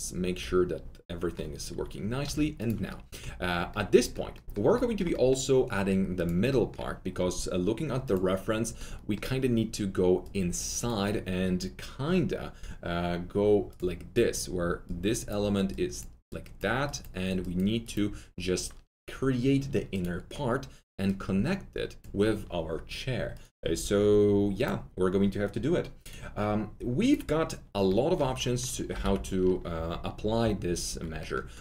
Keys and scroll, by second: 1.7 alt+2, 28.7-29.4 typing.